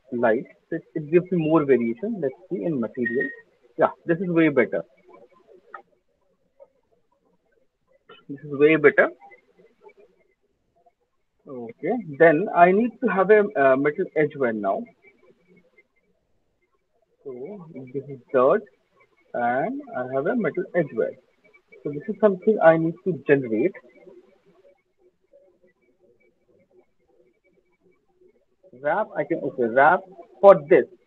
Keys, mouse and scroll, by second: 0.0 click, 0.5 click, 2.6 alt+click, 2.9 alt+click, 2.9 m, 4.6 alt+click, 5.0 alt+middle click, 5.4 ctrl+s, 11.9 alt+right click, 12.4 alt+middle click, 12.6 alt+click, 13.1 alt+middle click, 13.2 alt+middle click, 13.8 middle click, 14.9 click, 15.3 click, 15.6 alt+click, 16.3 click, 16.8 alt+click, 18.3 middle click, 20.2 click, 20.6 click, 21.8 click, 24.6 alt+click, 24.9 alt+click, 24.9 alt+middle click, 26.0 alt+click, 27.1 alt+middle click, 27.2 alt+middle click, 27.7 alt+middle click, 27.7 alt+right click, 28.9 click, 29.4 alt+right click, 29.4 click, 29.5 alt+click, 30.0 click, 30.2 alt+click.